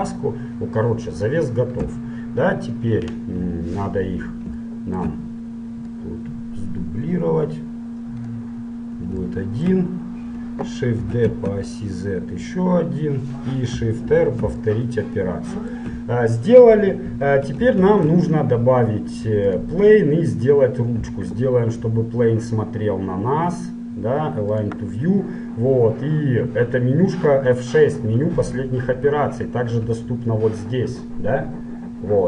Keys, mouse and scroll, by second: 0.4 click, 1.9 l, 4.8-6.1 middle drag, 6.1-8.0 drag, 8.8-12.7 middle drag, 11.2 shift+d, 14.2 shift+r, 14.9-17.4 middle drag, 18.0 shift+a, 22.0 F6, 30.1 t.